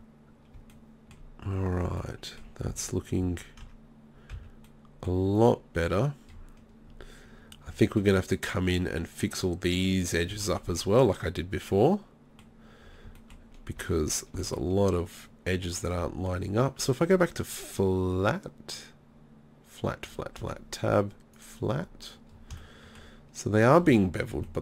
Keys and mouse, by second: 2.7 z, 3.0 z, 3.3 z, 3.6 Tab, 4.3 z, 5.4-6.7 right drag, 20.4 Tab, 21.8 middle click, 21.9-22.3 drag, 22.3 middle drag.